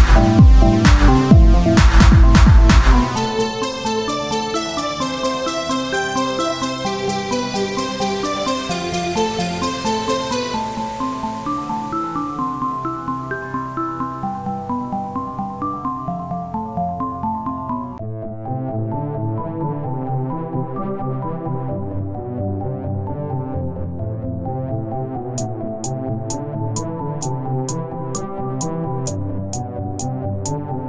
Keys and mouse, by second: 0.1 z, 1.7 z, 2.8 Tab, 2.8 z, 3.7 ctrl+r, 5.4 z, 7.5 ctrl+r, 7.5 z, 9.1 ctrl+r, 11.7 ctrl+r, 11.7 ctrl+z, 12.5 ctrl+r, 13.0 z, 14.7 z, 17.8 ctrl+Tab, 17.8 z, 19.4 z, 20.1 z, 20.8-26.9 drag, 20.8 z, 23.1 z, 26.9 z, 29.3 ctrl+r.